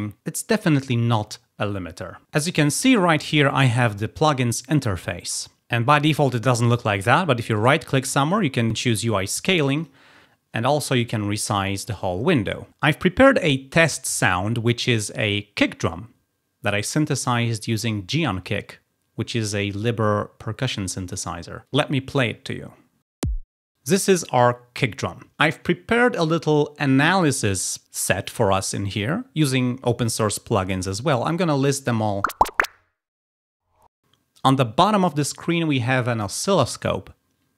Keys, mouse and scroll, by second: 2.3 click, 7.6 click, 7.6 right click, 9.7 click.